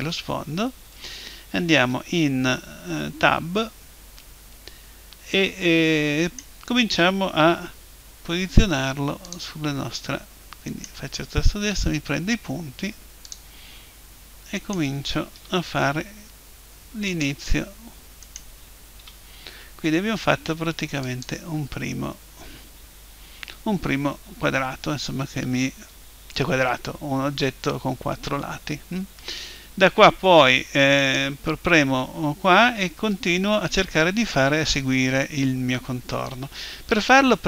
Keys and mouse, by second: 1.8 Tab, 6.3-8.2 right drag, 7.4 g, 9.4 click, 10.7-12.4 right drag, 11.6 g, 13.3 click, 14.6-16.4 right drag, 15.4 g, 16.3 middle click, 17.2 click, 18.2 right click, 19.0-20.2 right drag, 19.0 g, 21.2 click, 31.0-33.0 right drag.